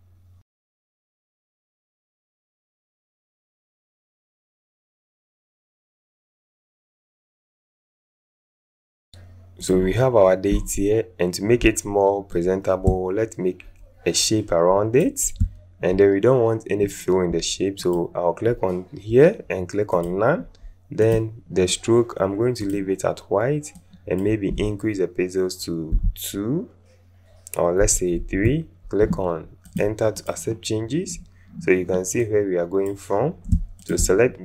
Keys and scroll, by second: 1.0 ctrl+a, 1.0 ctrl+KP_1, 1.1 ctrl+Return, 1.7 Return, 2.4 KP_2, 3.0 Return, 3.4 shift+t, 5.2 KP_6, 5.3 Return, 5.6 alt+Up, 5.8 alt+Up, 6.4 KP_5, 6.5 Return, 26.0 KP_2, 27.8 Up, 28.2 Return.